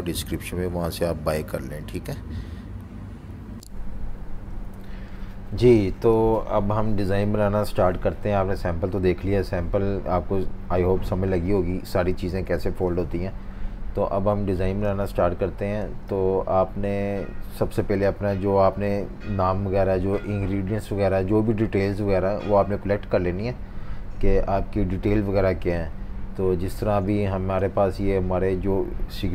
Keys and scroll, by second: 4.4 F18, 26.0 F19, 26.7 z, 28.0 v.